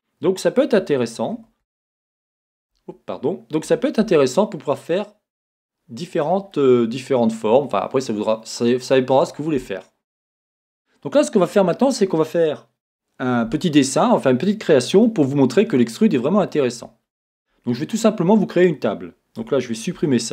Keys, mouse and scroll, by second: 0.8 z, 2.9 Escape, 3.6 g, 6.2 click, 6.5-20.3 middle drag, 11.0 scroll down 1, 19.4 Tab, 20.0 x.